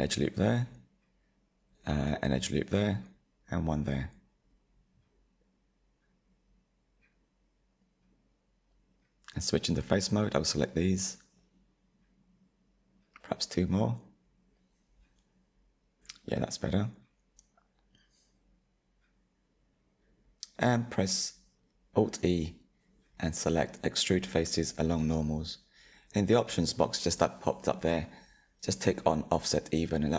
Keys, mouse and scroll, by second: 1.3 ctrl+r, 2.6 ctrl+r, 4.6-9.2 middle drag, 9.2 3, 9.9 click, 10.4 shift+click, 10.8 shift+click, 11.1 shift+click, 11.6 shift+click, 12.0 shift+click, 12.6-15.6 middle drag, 15.8 shift+click, 16.4 shift+click, 16.9-20.4 shift+middle drag, 20.8 alt+e, 27.9 click, 28.5-30.1 shift+middle drag.